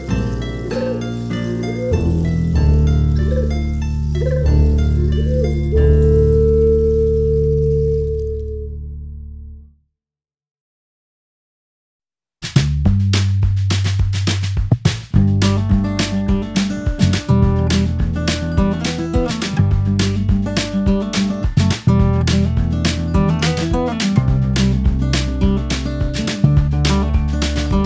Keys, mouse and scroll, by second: 1.3 click, 5.2 click, 5.5 x, 6.4 ctrl+s, 7.0 shift+a, 10.2 click, 10.5 shift+d, 11.1 ctrl+z, 11.5 scroll down 5, 11.7 click, 12.1 shift+d, 12.5 scroll up 8, 12.8-13.9 drag, 13.9 middle click, 14.4-15.2 drag, 15.5-16.8 middle drag, 15.9 click, 16.8 click, 17.1-18.1 middle drag, 18.1 click, 18.7-19.7 drag, 20.0-20.6 scroll up 8, 20.6-22.7 drag, 22.8-24.6 drag, 25.3-27.8 drag.